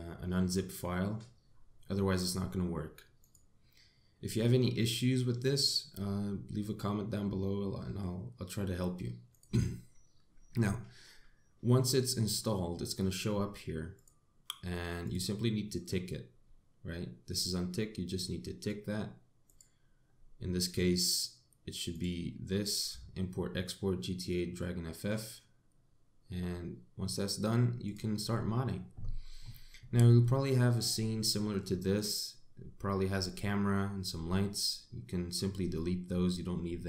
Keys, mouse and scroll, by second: 30.0 middle click, 31.4 middle click.